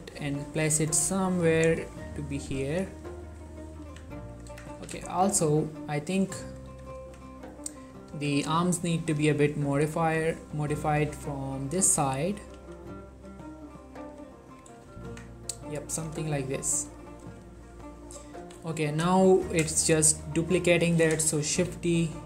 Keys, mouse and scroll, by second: 0.4-1.5 ctrl+middle drag, 1.5-1.9 scroll up 1, 2.0 click, 2.2 middle click, 2.5 g, 2.7 y, 3.3 right click, 4.0 1, 4.4 click, 4.6 Tab, 4.8 z, 5.1 shift+middle click, 6.6 click, 6.8 g, 7.1 y, 7.2-8.0 scroll down 1, 8.2 x, 8.7-9.7 scroll down 1, 9.7 scroll down 1, 9.9 click, 11.2 g, 12.0 click, 12.7 g, 13.2 click, 14.2 g, 14.6 click, 15.0 z, 15.2 Tab, 15.8 click, 16.4-17.4 middle drag, 17.4 4, 18.5 typing, 19.3 ctrl+middle drag, 19.5 z, 19.8 shift+middle click, 21.7 shift+d.